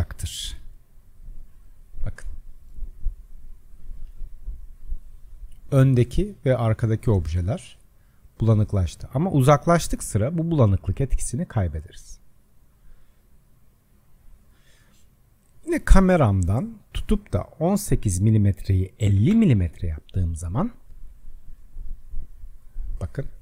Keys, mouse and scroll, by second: 0.3 KP_Decimal, 1.2-1.6 scroll up 6, 1.6 scroll down 1, 2.3 middle click, 2.8-3.2 scroll down 1, 3.2-7.3 shift+middle drag, 7.3-8.7 scroll down 5, 8.7-9.4 scroll down 5, 9.4-10.0 scroll up 7, 10.5-11.5 scroll up 10, 11.6-12.2 middle drag, 12.2-13.1 scroll down 5, 13.1-16.1 middle drag, 16.4 click, 17.8-20.8 drag, 21.5-22.2 scroll down 2, 22.2-23.4 middle drag.